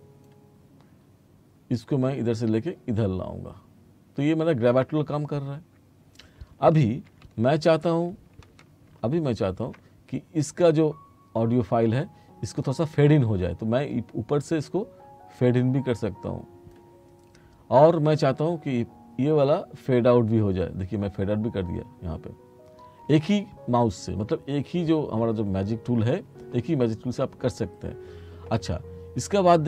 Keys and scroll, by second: 7.3 t.